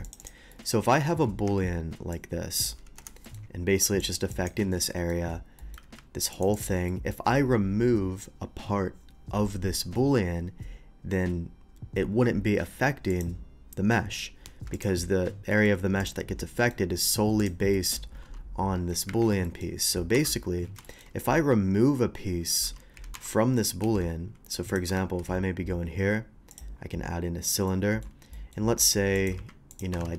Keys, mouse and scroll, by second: 0.0 click, 0.2 click, 0.5-0.9 middle drag, 1.5 Tab, 2.1-2.6 drag, 3.0 Return, 3.2 middle click, 4.0 click, 4.3 click, 4.9 shift+middle drag, 5.6 middle click, 5.8 q, 6.3 click, 6.5 click, 6.9 middle drag, 13.1 click, 14.7 click, 15.5 middle drag, 16.0 click, 16.6 middle click, 17.4 click, 17.7 middle click, 18.3 g, 19.1 Escape, 19.4 middle click, 20.1 KP_7, 20.8 shift+middle click, 22.6 g, 23.0 x, 23.8 x, 24.7 click, 25.0 shift+a, 26.5 click, 27.7-28.0 middle drag, 28.3 middle drag, 28.8-30.1 typing, 29.2 click, 29.7 click.